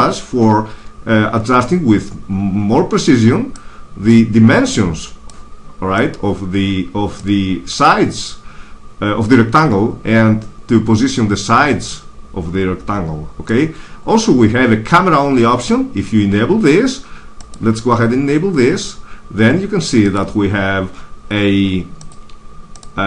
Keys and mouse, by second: 0.0-1.7 drag, 4.0-5.8 drag, 5.9-9.6 drag, 13.7 click, 18.8 click, 19.9 click, 20.8 click, 21.6-23.0 drag.